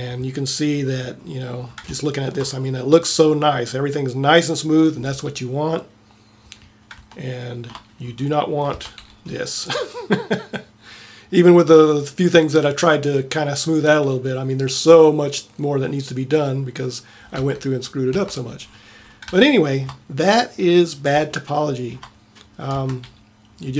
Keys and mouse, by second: 1.1 click, 2.0 middle click, 7.7 middle click, 8.9 Tab, 14.6-17.5 middle drag, 17.5 Tab, 18.2 Tab, 23.0 Tab.